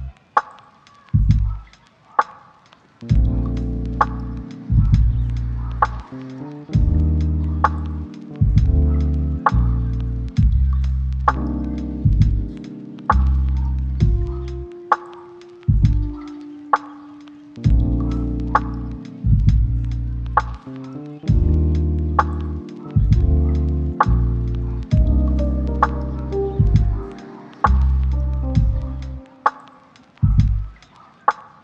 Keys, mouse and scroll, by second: 0.4 double click, 1.2 middle click, 1.8 shift+middle click, 4.0 right click, 4.6 typing, 4.9 Return, 6.7 double click, 13.8 middle click, 15.1 shift+middle click, 16.2 double click, 18.6 middle click, 19.8 shift+middle click, 20.3 ctrl+middle click, 20.6 middle click, 21.1 middle click, 21.2 ctrl+middle click, 21.9 shift+middle click, 23.4 double click.